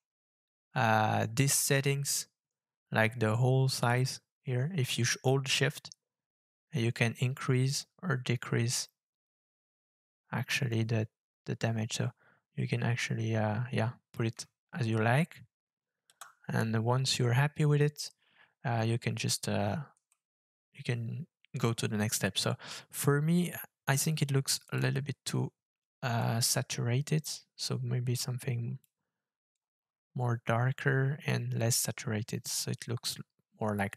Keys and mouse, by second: 3.8-5.6 shift+drag, 5.6 shift+middle click, 6.3-7.7 shift+drag, 7.7 shift+middle click, 7.7-8.8 shift+drag, 8.8 shift+middle click, 8.9-10.9 shift+drag, 11.6 shift+click, 12.0 shift+click, 12.4-14.1 shift+drag, 16.1 KP_0, 20.1-21.6 middle drag, 24.6 click.